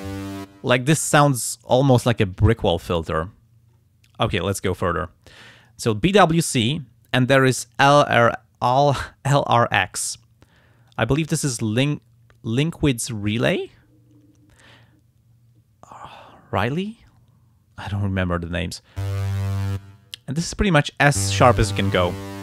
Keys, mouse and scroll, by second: 5.6 click, 10.9 click, 12.6-13.7 drag, 22.3-22.4 drag.